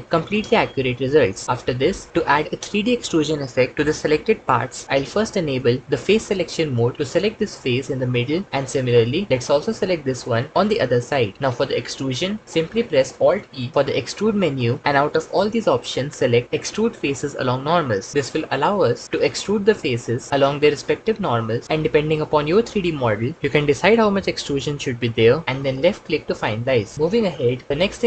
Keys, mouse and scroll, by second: 6.0 3, 14.4 alt+e.